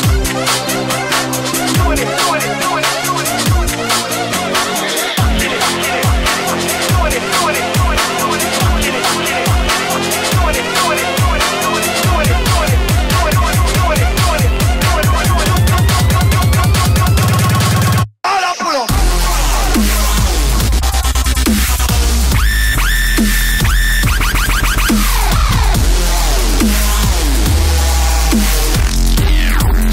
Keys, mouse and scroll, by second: 5.1-6.2 drag, 8.8-20.4 drag, 21.2-22.4 middle drag, 27.4-29.9 drag.